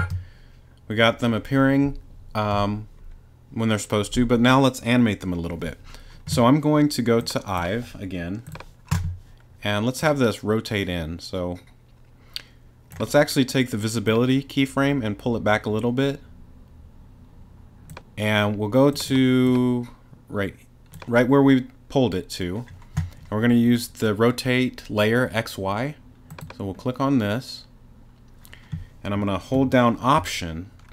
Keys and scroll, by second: 0.0 space.